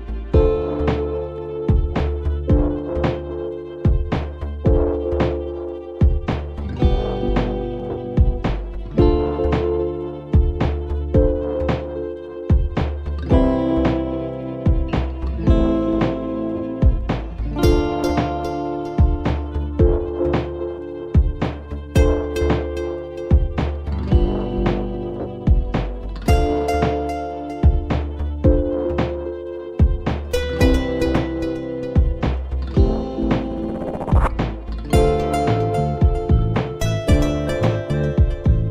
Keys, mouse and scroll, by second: 0.0 drag, 1.4 shift+a, 5.4 ctrl+z, 5.9 click, 7.2 shift+s, 9.4 shift+a, 10.7 scroll up 1, 10.8-12.0 middle drag, 12.0 s, 15.1 click, 15.6 click, 17.4 shift+click, 19.4 ctrl+p, 22.2 click, 22.9 click, 23.6 g, 24.7-25.1 middle drag, 25.1-25.5 scroll down 2, 25.5 scroll up 1, 25.6-26.3 middle drag, 26.3 shift+scroll up 1, 26.4-29.4 shift+middle drag, 29.9 click, 30.6 ctrl+z, 31.9-34.1 drag, 34.1 middle click, 34.6-35.1 scroll up 1, 35.1-36.2 middle drag, 36.2-37.2 scroll down 1, 37.2-38.7 drag.